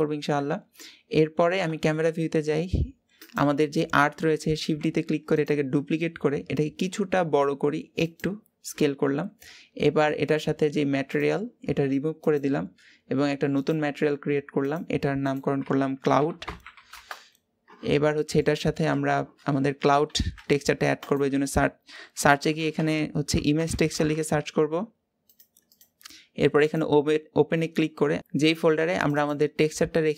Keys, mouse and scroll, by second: 0.3-1.4 scroll down 2, 1.4 KP_0, 2.2-3.2 scroll up 3, 3.2 click, 4.4 shift+d, 6.0-6.8 scroll up 1, 6.8 s, 12.7-18.9 drag, 18.9-25.1 scroll up 4, 26.7-30.1 drag.